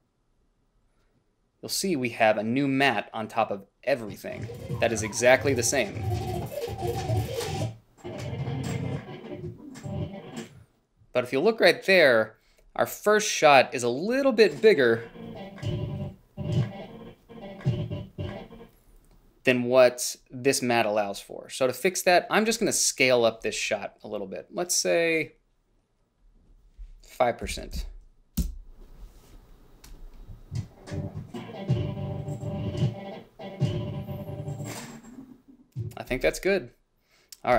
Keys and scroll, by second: 27.8 typing, 28.7 Return.